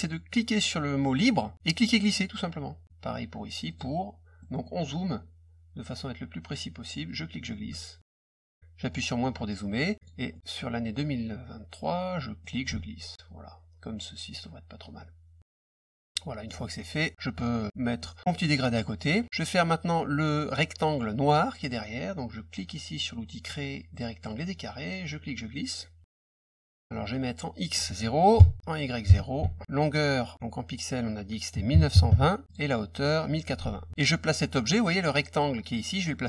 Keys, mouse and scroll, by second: 1.7-2.8 drag, 3.6 click, 4.4 middle click, 4.4-5.0 scroll up 3, 4.6 middle click, 4.8 middle click, 7.0 click, 9.2 middle click, 10.0 click, 10.3 middle click, 12.4-14.8 ctrl+drag, 16.9-18.0 drag, 18.2 click, 18.6 middle click, 24.3 click, 25.0 click, 26.4 click, 27.5 click, 29.4 Tab, 32.4 click, 33.6 ctrl+a.